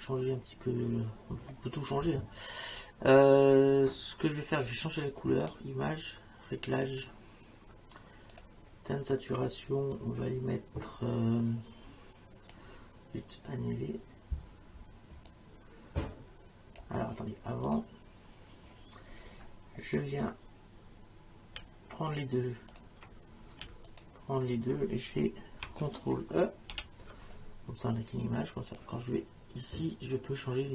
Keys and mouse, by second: 5.5 click, 8.3 click, 10.0 click, 15.3 click, 17.7 click, 22.1 click, 23.9 click, 26.7 ctrl+e, 28.7 click.